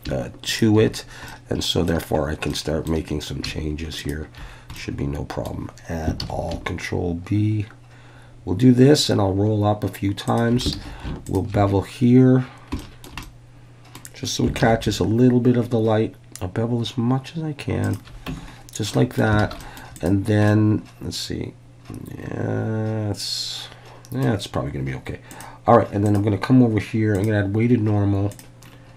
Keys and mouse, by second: 0.5 shift+click, 1.3 middle click, 2.5 middle click, 4.8 middle click, 6.2 ctrl+b, 10.3 shift+click, 10.8 alt+a, 11.3 alt+shift+click, 12.8 shift+middle click, 13.2 middle click, 14.6 ctrl+b, 17.8 shift+click, 18.3 Tab, 18.9-19.2 middle drag, 19.4 alt+a, 19.6 middle click, 20.0 click, 20.5-24.3 middle drag, 25.4 drag, 26.0-27.3 drag, 28.3 drag.